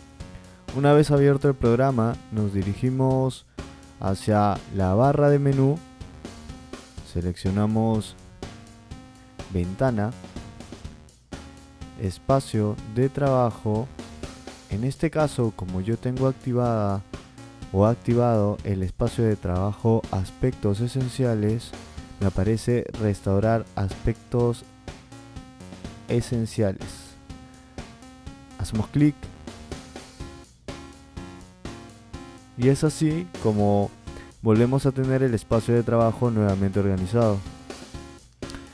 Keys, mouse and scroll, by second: 0.6 drag, 10.0 click, 29.9 click, 37.5 click.